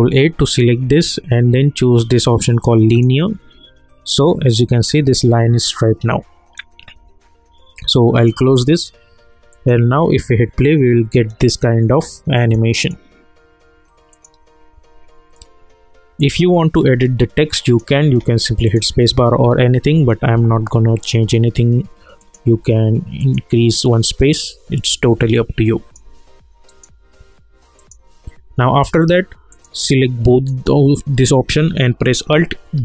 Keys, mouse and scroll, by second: 2.9 click, 8.1 click, 12.3 click, 18.1 space, 18.6 click, 22.2 click, 22.5 space, 23.2 click, 24.8-25.2 scroll down 1, 25.3-32.7 alt+drag, 32.7 alt+g.